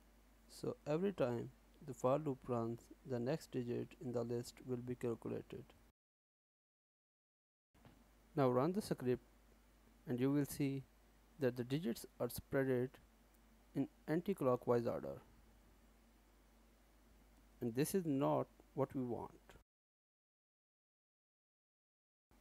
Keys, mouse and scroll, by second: 0.0-1.1 typing, 2.0 alt+s, 5.9 ctrl+s, 7.1-8.2 scroll up 3, 10.6 click, 14.1 ctrl+space, 14.7-17.1 scroll down 1, 17.1-18.1 scroll down 2, 22.3 scroll up 6.